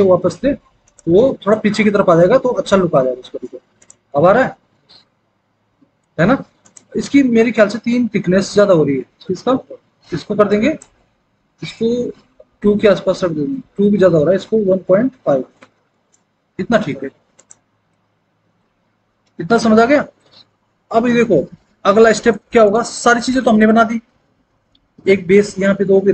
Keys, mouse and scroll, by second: 12.3 KP_2, 12.6 Return, 14.7 KP_1, 15.5 KP_5, 15.8 Return.